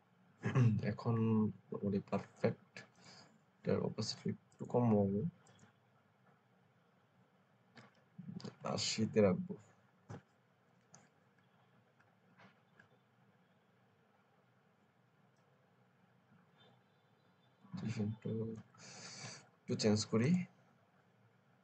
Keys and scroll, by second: 8.2 Down, 8.4 Down, 8.9 Down, 9.9 Return.